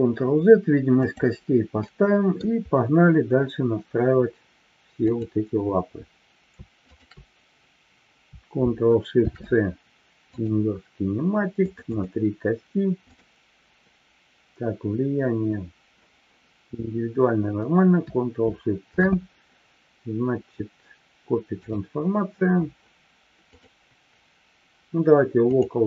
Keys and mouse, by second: 1.7-2.4 middle drag, 5.0 click, 6.7 shift+click, 9.1 ctrl+shift+c, 11.6 click, 13.0 click, 18.9 ctrl+shift+c, 23.6-25.8 drag.